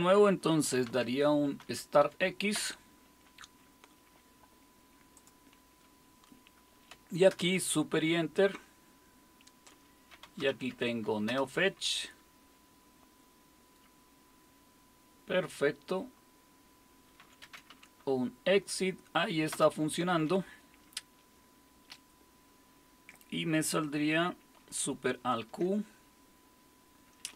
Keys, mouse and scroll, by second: 0.3-2.0 typing, 2.6 Return, 5.2-7.3 drag, 7.3 super+Return, 9.9-11.0 typing, 11.3 Return, 17.0-18.2 typing, 19.5 Return, 25.2 alt+super+q.